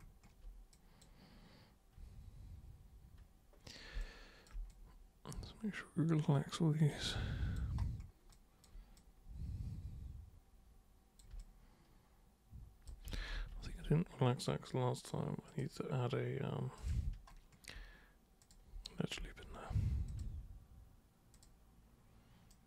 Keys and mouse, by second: 0.7 super+click, 2.0 super+1, 3.9 super+b, 4.0 click, 4.7-6.8 super+drag, 7.1 alt+super+click, 8.3 alt+super+click, 8.9-11.1 super+drag, 11.4-12.8 alt+super+drag, 13.1 ctrl+super+z, 13.3 ctrl+super+z, 13.7 ctrl+super+z, 15.4 super+click, 16.8 super+click, 18.4 super+click, 18.8 alt+super+click, 20.1 ctrl+super+click, 21.3 super+click, 22.5 super+right click.